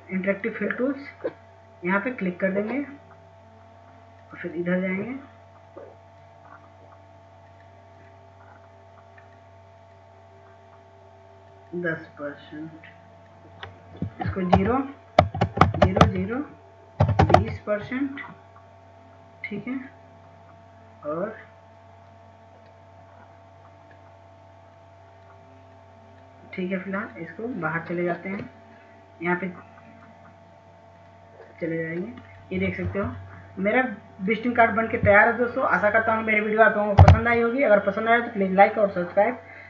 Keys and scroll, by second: 17.3-18.4 typing, 19.6-20.7 typing, 35.8 F2.